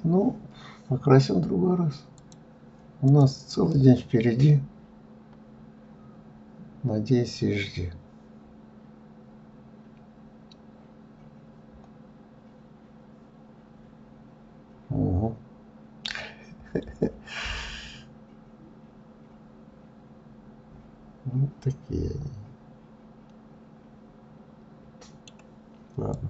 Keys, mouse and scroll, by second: 2.0 click, 2.9 click, 3.6-6.7 middle drag, 26.0 click.